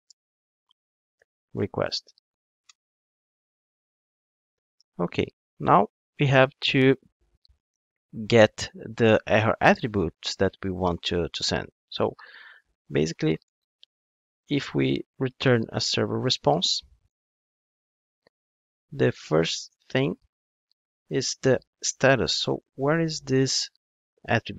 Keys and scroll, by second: 0.1 Return, 3.6 alt+Return, 17.2 Return, 17.6 super+z, 20.4 Return, 21.4 Return.